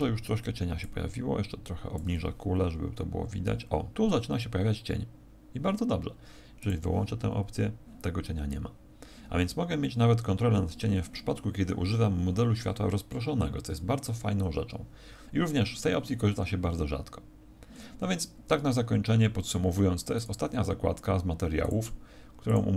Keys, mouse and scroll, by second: 0.7 click.